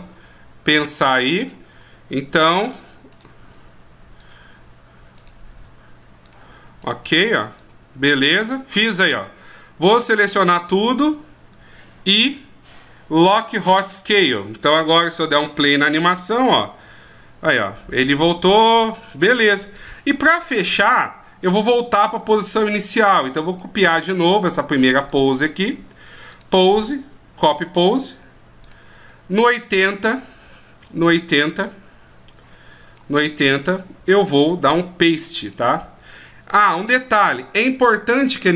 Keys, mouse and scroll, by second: 0.0 r, 1.4 right click, 1.7 r, 3.1 right click, 3.4 r, 5.2 right click, 5.6 r, 6.8 right click, 9.8 a, 12.3 i, 15.6 click, 26.3 click, 30.1 click, 34.2 click, 35.6 click.